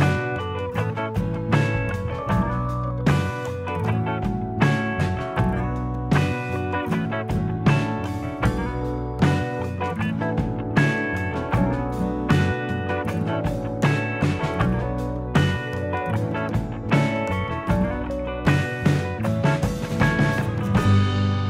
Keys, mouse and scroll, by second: 18.6 middle click, 19.9-20.5 scroll up 3, 20.5 shift+middle click, 21.0-21.4 scroll up 3.